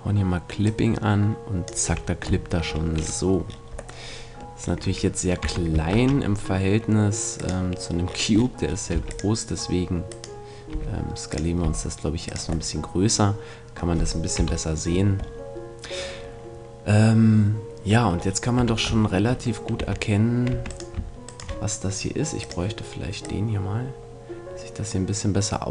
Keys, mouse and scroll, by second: 1.9 a, 2.4-5.1 middle drag, 5.4 Tab, 5.9 shift+a, 8.9 x, 10.1-11.9 right drag, 10.7 s, 11.6 click, 11.6 s, 14.3 KP_1, 16.1-19.8 middle drag, 18.5 Tab, 19.8 Tab, 20.5 Tab, 20.7-23.0 right drag, 22.4-25.0 drag.